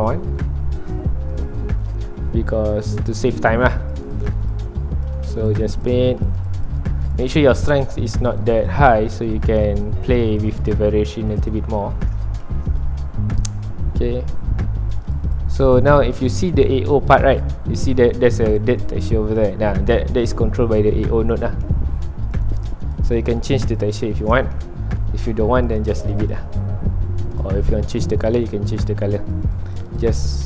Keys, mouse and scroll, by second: 0.9 click, 1.9 middle click, 2.2 scroll up 1, 2.7 middle click, 3.6 scroll down 1, 4.0-7.7 drag, 7.7 middle click, 8.4-11.9 drag, 11.9 middle click, 12.8 ctrl+alt+click, 13.8-14.9 middle drag, 14.9-16.5 drag, 16.5 middle click, 16.9 scroll up 1, 19.5 middle click, 20.0 scroll down 1, 20.7-22.3 shift+middle drag, 22.3-24.3 drag, 24.3-25.7 shift+middle drag, 25.7-30.4 drag.